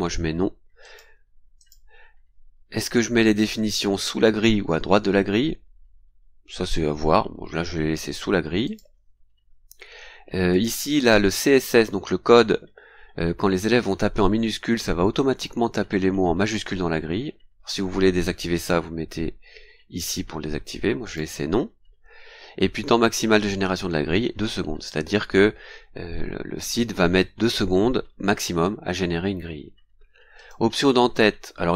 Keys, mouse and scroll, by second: 0.8 click, 1.6 click, 3.4 click, 8.6 click, 9.4 scroll down 2, 10.5 click, 21.1 click, 22.1 scroll down 2, 30.4 click, 31.1 scroll down 2.